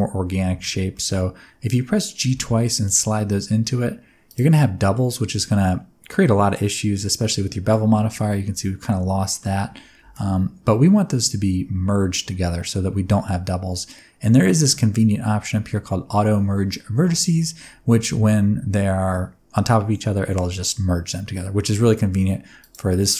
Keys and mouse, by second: 0.9 middle click, 2.2 g, 2.3 g, 4.3 click, 4.7 middle click, 7.3 middle click, 8.8 middle click, 10.0 ctrl+z, 22.6 click.